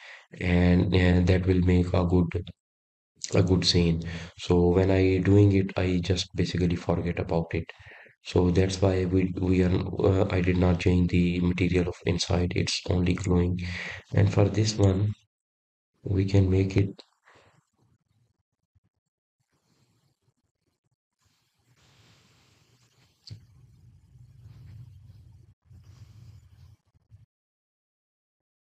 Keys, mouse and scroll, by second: 6.4-6.9 scroll down 4, 13.9-14.3 scroll up 4, 14.7-15.1 scroll up 2, 17.3-17.7 scroll down 5, 18.4 click, 20.0 click, 21.1 click, 28.0 click.